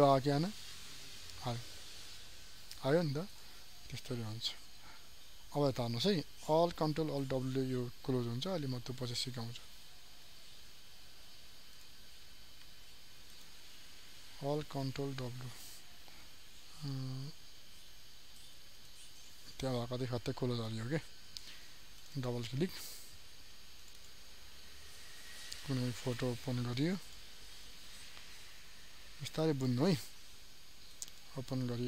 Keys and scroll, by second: 15.1 ctrl+alt+w.